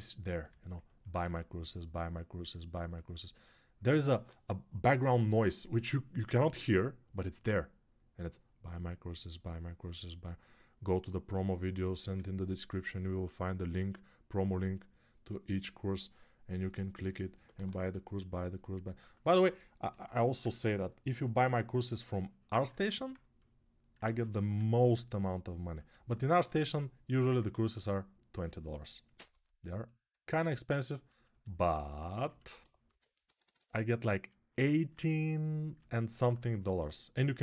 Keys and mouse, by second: 23.8 ctrl+z, 25.5-32.4 drag, 29.0 2, 32.7 g, 33.0 ], 33.2 ].